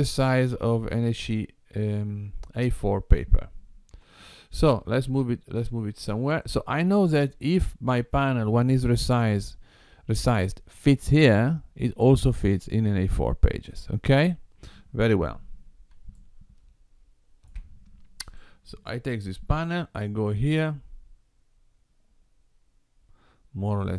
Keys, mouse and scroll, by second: 4.1 g, 16.2 shift+middle click, 18.3 click, 19.6 g.